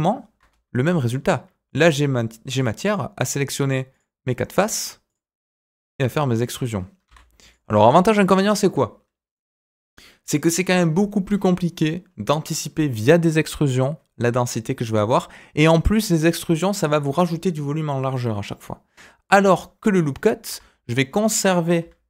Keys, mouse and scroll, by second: 0.8 click, 1.6 click, 2.5 shift+click, 3.2 shift+click, 3.9 shift+click, 4.5 shift+click, 5.0 shift+click, 5.7 shift+click, 6.3 shift+click, 7.0 e, 7.7 middle click, 8.6 middle click, 14.9-15.9 middle drag, 20.4 Tab.